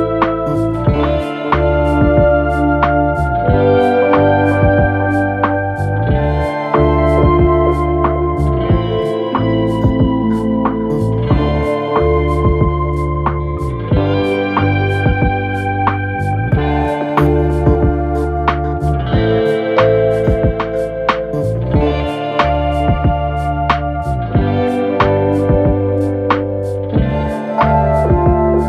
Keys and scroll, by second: 5.7 4, 7.2 ctrl+d, 7.4 Escape, 10.9 3, 11.7 0, 11.8 Return, 16.1 4, 20.0 F9, 21.1 2, 26.9 ctrl+d, 27.1 Escape.